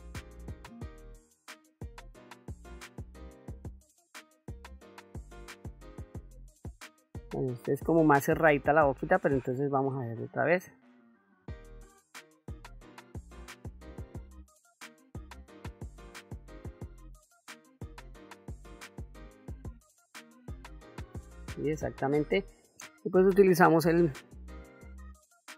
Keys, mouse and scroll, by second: 0.7 ctrl+middle click, 1.8 ctrl+middle click, 2.4 middle click, 3.3 ctrl+middle click, 4.3 ctrl+middle click, 4.7 middle click, 6.3 ctrl+middle click, 7.0 middle click, 7.8 ctrl+middle click, 8.8 ctrl+z, 9.6 ctrl+z, 10.7 KP_1, 11.6 ctrl+middle click, 12.6-14.2 drag, 14.7 click, 16.0 click, 17.2 click, 18.3 ctrl+middle click, 18.7 ctrl+middle click, 19.0 middle click, 19.4 ctrl+middle click, 19.7-21.0 ctrl+middle drag, 21.2 middle click, 21.8 ctrl+middle click, 23.2 click, 24.8 click, 25.4 click.